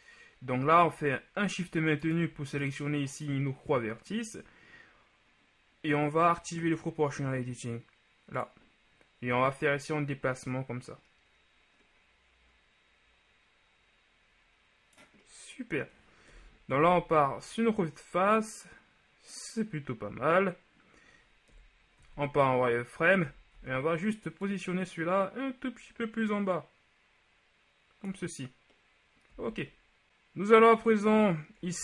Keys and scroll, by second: 16.5 KP_1, 21.6 KP_1, 22.1 z, 23.3 a, 29.5 z.